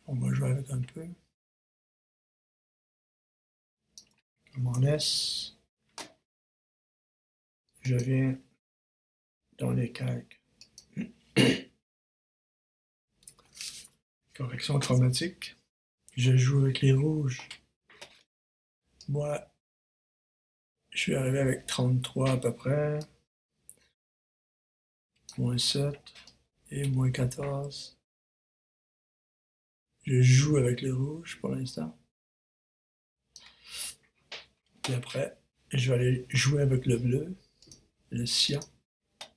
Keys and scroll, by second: 4.4 super+s, 4.6 super+Return.